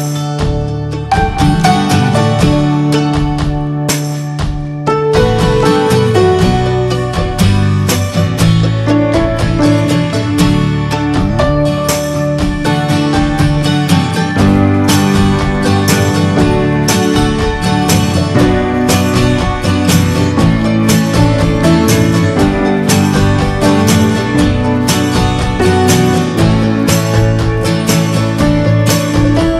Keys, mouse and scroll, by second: 2.4 middle click, 2.5 scroll up 3, 2.8-4.0 shift+middle drag, 4.0 scroll down 3, 4.3-6.1 middle drag, 6.1 ctrl+z, 6.2 scroll down 1, 8.3-15.5 drag, 15.5 middle click, 16.1-16.6 scroll up 3, 17.3 f, 20.4-21.7 scroll down 3, 22.3 f.